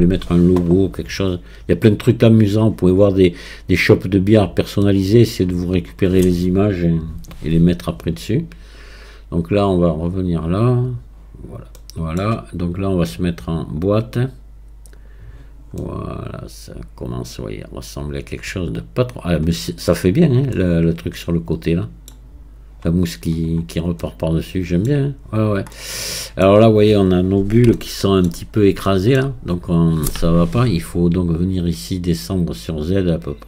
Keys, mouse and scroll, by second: 0.1 scroll down 2, 1.3 scroll up 1, 4.9-7.9 middle drag, 9.0-10.2 scroll down 9, 10.9 click, 11.8-13.9 middle drag, 13.9-15.8 drag, 15.8-18.8 middle drag, 20.5-23.5 middle drag, 23.6-24.0 scroll down 3, 24.0-25.3 middle drag, 25.3-25.7 scroll up 3, 25.7 middle click, 26.7-27.8 scroll up 2, 27.8 shift+middle click, 28.5-28.9 scroll up 3, 28.9-30.9 shift+middle drag, 30.9-31.7 scroll up 1, 31.7-32.1 scroll up 2, 32.1-33.4 drag.